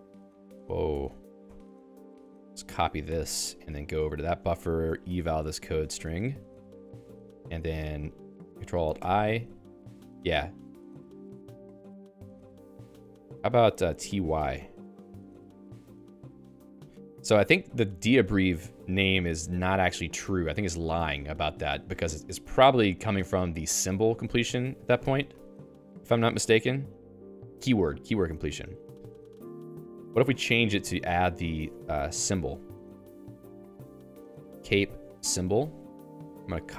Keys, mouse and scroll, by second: 0.0-3.1 typing, 1.0 Escape, 3.5 ctrl+alt+j, 4.2 Return, 4.7 alt+:, 5.9 shift+Insert, 6.5 Return, 8.3 a, 9.2 ctrl+alt+i, 11.1 Down, 11.9 Up, 12.8-14.5 typing, 14.9 ctrl+alt+i, 17.7 Down, 18.2 Down, 18.5 Down, 18.7 Down, 19.1 Up, 19.7 Up, 19.9 Up, 20.1 Up, 20.5 Up, 20.6 Down, 20.9 Down, 21.2 Down, 22.2 Up, 23.0 Down, 24.3 ctrl+g, 24.9 ctrl+g, 25.0 Escape, 25.4 ctrl+alt+j, 29.1 ctrl+g, 30.6 ctrl+alt+j, 31.0 Return, 31.1-36.3 typing.